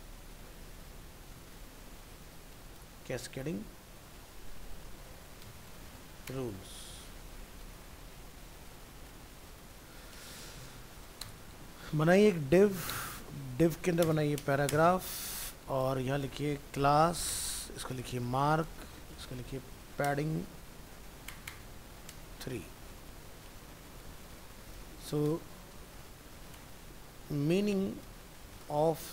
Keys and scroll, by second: 7.8 ctrl+s, 23.1 ctrl+s.